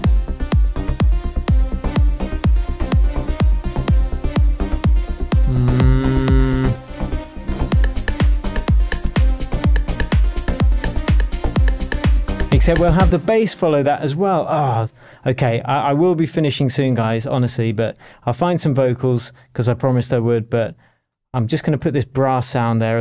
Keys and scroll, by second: 13.0 space.